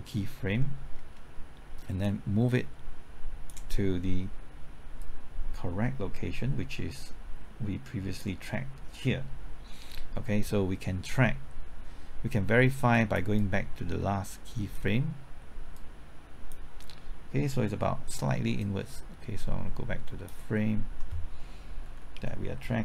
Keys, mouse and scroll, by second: 0.9-2.0 scroll down 1, 2.0-13.4 drag, 13.4-15.1 drag, 15.1-21.1 drag, 21.8 Left.